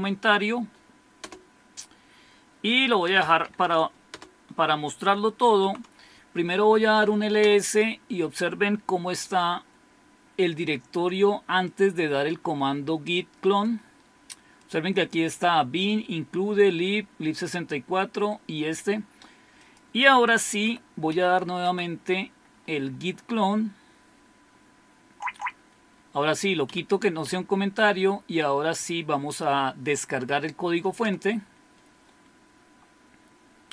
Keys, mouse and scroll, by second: 1.2 Return, 2.9-4.1 typing, 5.2-5.9 typing, 7.4 Return, 11.6-13.7 drag, 14.6 click, 19.6-20.7 drag, 20.7 Up, 21.1 Up, 21.6 Up, 22.5 Left, 23.0 Left, 23.1-24.8 Left, 25.0 Left, 26.7 Delete, 27.3 Delete, 31.1 Return.